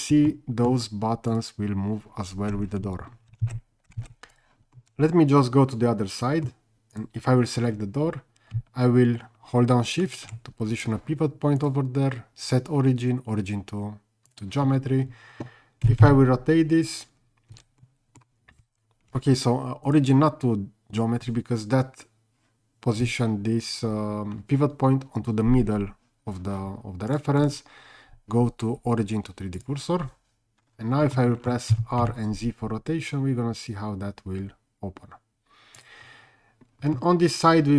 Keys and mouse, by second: 0.3-0.7 middle drag, 3.5 ctrl+z, 4.0 ctrl+z, 4.3 click, 4.8-6.5 middle drag, 6.9 click, 10.1 shift+right click, 11.7-14.4 drag, 15.8 r, 16.0 z, 17.5 Escape, 17.8-18.2 middle drag, 20.0-22.5 drag, 27.1 click, 27.5-29.9 drag, 31.1 middle click, 31.7 r, 32.0 z, 37.0-37.7 middle drag.